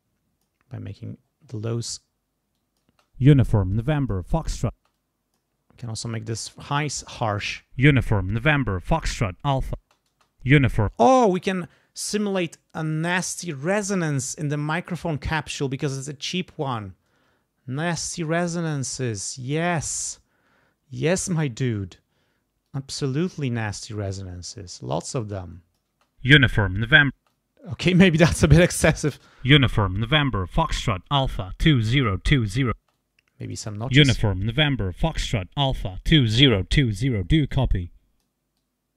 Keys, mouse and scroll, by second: 0.6-1.0 scroll down 1, 1.0-1.9 scroll up 1, 2.1 scroll down 1, 2.5 click, 2.9 space, 3.7 click, 4.7 space, 4.9 click, 5.5 scroll up 2, 6.0-6.4 scroll down 2, 6.8 click, 7.4 space, 8.3 scroll up 2, 9.2-9.8 scroll down 4, 9.8 space, 9.9-10.3 scroll up 2, 10.9 space, 17.7 click, 18.2-18.7 scroll up 2, 18.7-19.7 scroll down 2, 19.7 click, 22.6-23.9 drag, 23.9-24.3 scroll up 2, 24.3-25.1 scroll down 2, 25.2 click, 25.9 space, 27.1 space, 27.3 click, 29.1 space, 30.1-32.2 drag, 32.8 space, 32.9 click, 33.6 space, 35.8-36.7 scroll up 4, 36.7-37.4 scroll down 2, 37.5 click, 38.6 click.